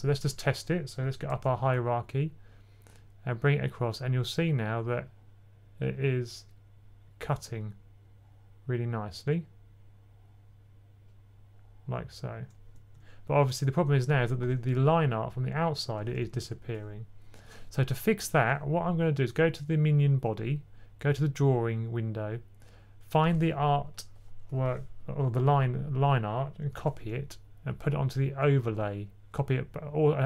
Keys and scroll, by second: 1.2 typing, 14.1 typing, 16.2-18.0 super+z, 18.7 typing, 25.4 super+a, 26.6 c, 28.5 super+v.